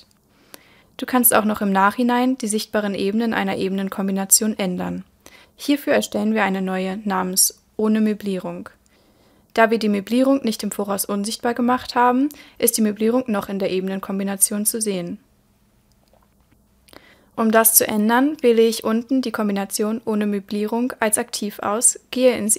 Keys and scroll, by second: 16.3 super+l.